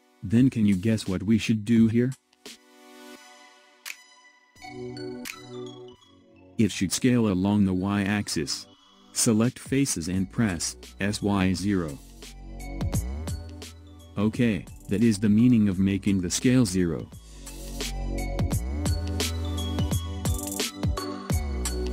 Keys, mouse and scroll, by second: 2.6-4.0 middle drag, 4.0 click, 10.4 s, 14.8-15.8 scroll up 3, 15.8-18.8 middle drag, 21.8-21.9 middle drag.